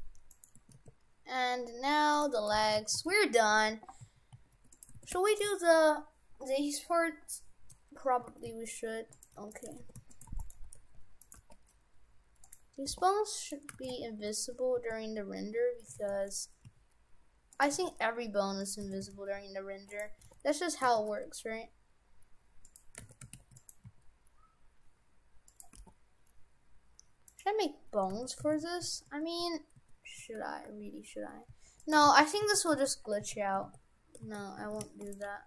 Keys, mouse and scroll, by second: 0.3 shift+right click, 0.7 e, 2.3 Tab, 2.6 shift+f, 5.0 shift+f, 8.3 shift+f, 9.4 Tab, 9.5 right click, 9.8 shift+f, 10.3 shift+d, 10.7 g, 11.3 g, 13.1 r, 13.7 shift+f, 16.7 s, 17.7 g, 18.9 shift+f, 20.2 r, 20.9 r, 23.1 shift+f, 23.9 s, 25.7 g, 28.2 shift+f, 32.1 ctrl+z, 32.5 ctrl+z, 32.9 ctrl+z, 33.3 ctrl+z, 33.7 ctrl+z, 34.3 ctrl+z, 34.7 shift+f, 35.3 g.